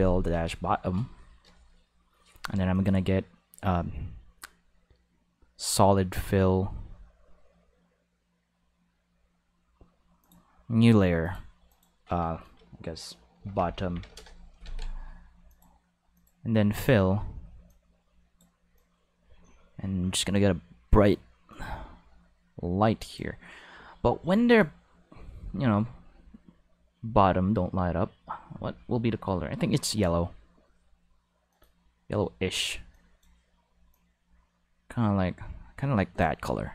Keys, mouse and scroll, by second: 0.3 ctrl+s, 2.7 click, 10.2 click, 11.2 click, 11.7 click, 13.3 shift+b, 13.5 o, 13.7 t, 13.8 t, 14.1 Return, 14.6 ctrl+s, 15.5 click, 16.1 click, 16.7 click, 17.7 click, 18.7-20.3 drag, 21.5-23.9 drag, 24.5 click, 31.5 click, 32.9 click, 33.9-36.7 drag.